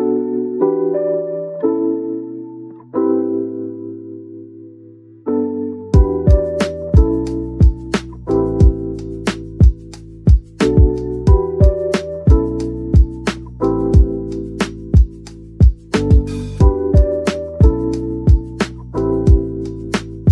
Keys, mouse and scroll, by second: 0.9-2.1 typing, 3.3-5.7 typing, 7.4 right click, 8.3-11.7 typing, 10.2 Return, 14.5-14.9 typing, 16.8-17.8 typing, 18.8-19.2 typing.